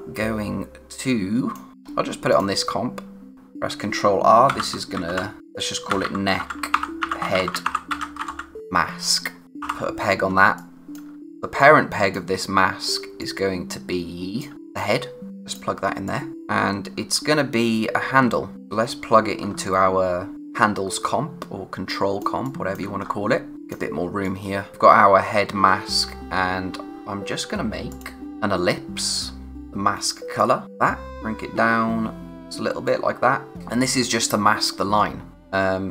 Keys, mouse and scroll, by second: 1.7-2.3 scroll up 1, 2.3 click, 3.3-8.8 typing, 9.6 ctrl+p, 10.3 space, 10.6 click, 10.8 space, 11.6 click, 13.0 space, 13.2 click, 13.5 space, 14.5 click, 15.9 space, 16.0 click, 16.4-17.2 scroll down 1, 17.2 space, 18.6-19.1 scroll up 1, 21.6 space, 21.9 click, 22.1 space, 23.0 scroll up 1, 23.5 click, 26.3-26.7 scroll down 1, 27.9 click.